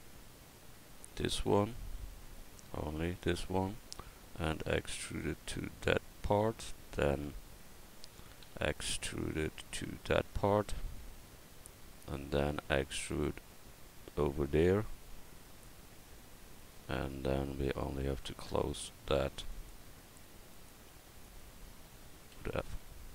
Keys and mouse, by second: 2.1 a, 2.8 c, 4.5 e, 8.4 e, 12.4 e, 19.6-22.9 right drag, 20.5-22.3 drag, 22.3 f.